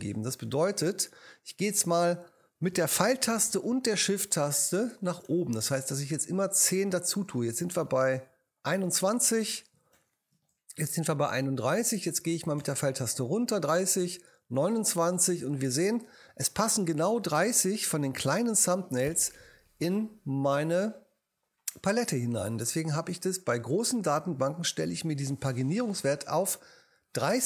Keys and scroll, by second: 5.2 shift+Up, 9.9 shift+Up, 12.6 Down, 14.1 Down, 18.3 Up.